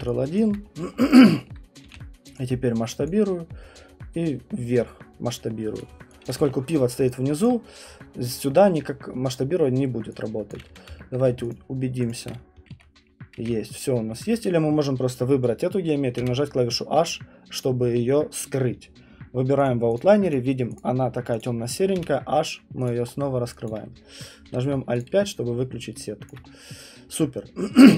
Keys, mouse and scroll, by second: 0.4 alt+click, 0.6 middle click, 0.8 middle click, 1.5 alt+middle click, 1.7 alt+middle click, 1.8 r, 3.1 click, 5.8 click, 6.2 alt+click, 6.4 q, 7.4 alt+click, 10.5 alt+click, 11.1 middle click, 11.5 shift+click, 12.1 shift+click, 12.7 ctrl+1, 13.4 ctrl+1, 14.2 click, 16.2 h, 19.6 click, 20.0 click, 20.3 click, 20.8 click, 21.4 click, 22.0 h, 22.8 click, 23.1 middle click, 23.4 middle click, 23.7 alt+right click, 24.4 alt+5, 25.0 alt+click, 25.2 middle click, 25.2 middle click, 26.3 alt+click, 26.5 middle click, 26.6 middle click.